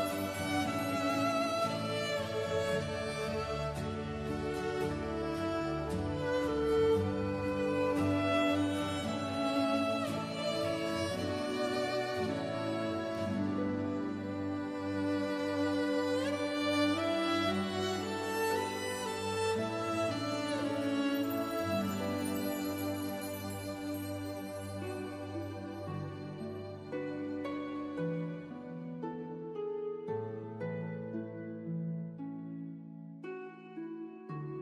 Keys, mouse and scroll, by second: 1.2 click, 1.7-2.4 scroll down 1, 2.4 right click, 4.3 click, 7.3 KP_5, 8.2 KP_Enter, 8.9 scroll down 1, 11.8 click, 12.5-13.2 scroll down 1, 13.8 right click, 15.1 click, 17.3 KP_1, 17.8 KP_Enter, 18.8 click, 19.2 right click, 20.5 click, 22.8 KP_1, 23.2 KP_Enter, 24.1 click, 24.5 right click, 28.2 click, 31.0 KP_Subtract, 31.5 KP_1, 32.0 KP_Enter, 33.9 click.